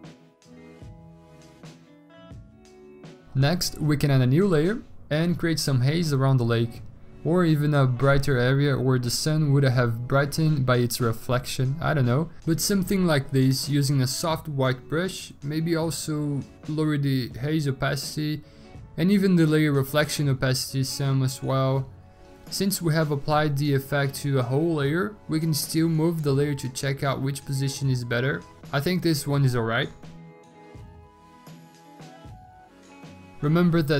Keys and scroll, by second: 6.7-8.3 typing, 18.9 v, 33.3 Escape, 33.3 alt+Tab, 33.4 alt+Tab, 33.8 alt+Tab.